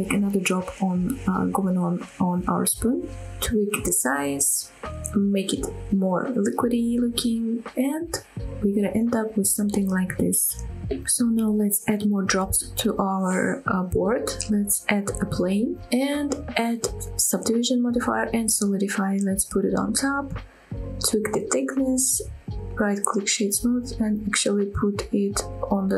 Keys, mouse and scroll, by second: 0.0-0.3 scroll up 2, 0.0 shift+middle click, 0.3 middle click, 0.5 e, 0.7 z, 1.2 click, 1.2 middle click, 1.7 middle click, 2.0 click, 2.0 middle click, 2.1 s, 2.3 right click, 2.6 s, 2.9-3.4 scroll up 7, 3.6 middle click, 4.0 click, 4.4 scroll up 1, 4.6 g, 4.7 z, 5.4 click, 5.6 click, 5.8 g, 5.8 g, 6.2 click, 6.2 scroll down 1, 6.3 middle click, 6.8 scroll down 2, 6.9 shift+middle click, 7.5 middle click, 7.9 shift+middle click, 8.3 middle click, 8.4 Tab, 8.5 click, 8.6 scroll down 3, 8.7 shift+middle click, 8.7 scroll up 3, 10.8 shift+click, 10.8 shift+right click, 11.4 scroll up 2, 11.6 shift+middle drag, 12.4 shift+a, 13.7 middle click, 14.0 s, 15.6 drag, 15.8 scroll up 2, 16.1 shift+middle drag, 16.4 middle click, 16.7 shift+middle click, 17.5-18.2 drag, 18.6-19.4 drag, 19.9-20.2 drag, 20.7-22.3 drag, 22.8-23.6 right drag, 23.6 middle click, 23.9 scroll up 1, 24.1 shift+middle click, 25.1 click, 25.6-25.9 middle drag.